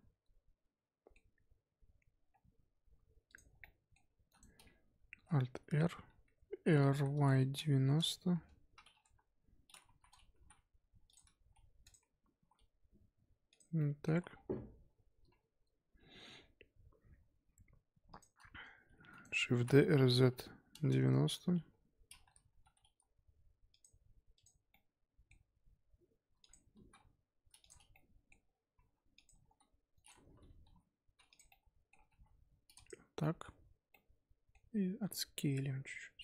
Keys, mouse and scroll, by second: 1.6-3.2 scroll up 3, 3.2 click, 3.6-4.2 middle drag, 4.2 shift+d, 5.6 alt+r, 6.9 r, 9.0 KP_1, 9.8 z, 10.3 g, 11.3 g, 12.3 s, 13.7 scroll down 1, 13.7-14.1 middle drag, 14.1 z, 14.3-17.3 scroll down 3, 18.1 shift+click, 19.0 shift+d, 19.5 r, 21.6 KP_7, 22.1-22.4 scroll up 3, 22.4 g, 24.3 click, 24.7-25.5 middle drag, 25.5 s, 26.7 g, 27.9 middle click, 28.4 scroll up 2, 28.7 g, 29.2 g, 30.6 g, 31.5-32.0 middle drag, 32.0 g, 33.2-34.9 middle drag, 34.9 s.